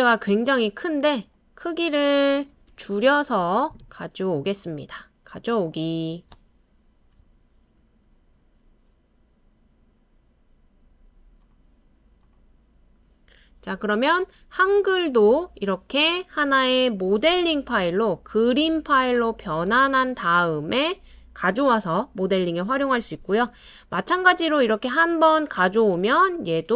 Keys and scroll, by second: 2.5-4.0 typing, 25.8 super+ㅊ, 26.0 super+ㅍ.